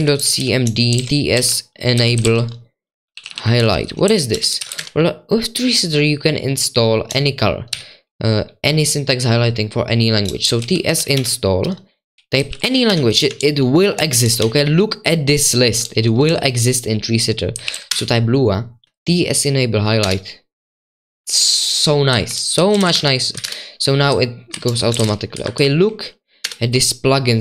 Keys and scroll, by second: 0.0-5.3 typing, 7.7 typing, 10.2-20.0 typing, 21.4-23.3 typing, 24.4-27.4 typing.